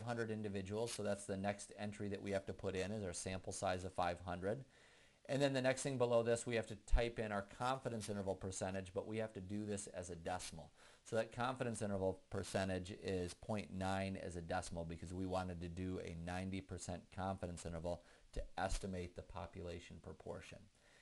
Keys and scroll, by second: 1.0 Return.